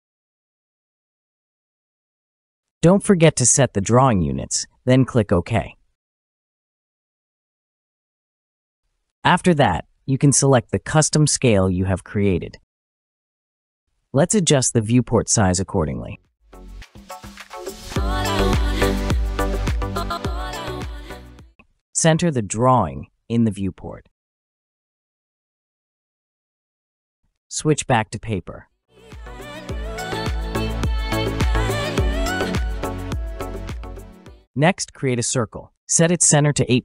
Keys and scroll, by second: 0.9-1.8 typing, 5.6 typing, 33.9 typing, 35.1-35.8 typing.